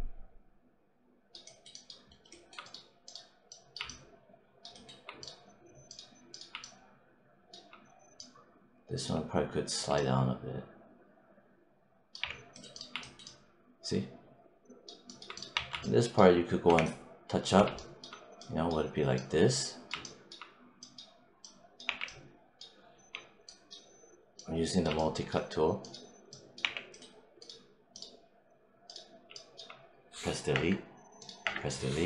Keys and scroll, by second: 12.1 3, 15.4 1, 21.7 w, 22.8 g, 26.5 w, 30.4 BackSpace.